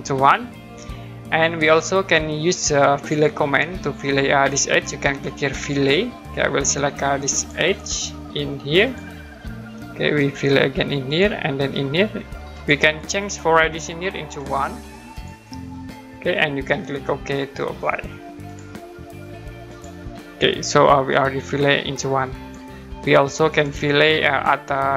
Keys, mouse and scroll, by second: 0.5-1.3 scroll up 1, 1.3-2.5 scroll down 1, 5.5 click, 6.1-7.3 scroll up 1, 7.3 click, 8.8 click, 9.3-9.7 scroll down 1, 9.7 middle click, 11.1 click, 12.5 click, 14.7 1, 15.1 click, 18.4 click, 23.0 middle click, 23.5 click, 24.0-24.9 scroll up 1.